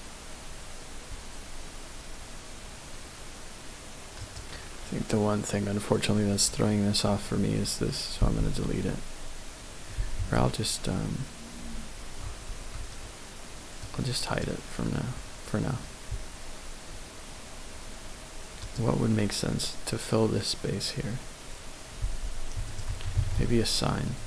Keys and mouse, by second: 4.2 click, 8.2 x, 13.9 click, 18.6 click, 23.1 shift+a.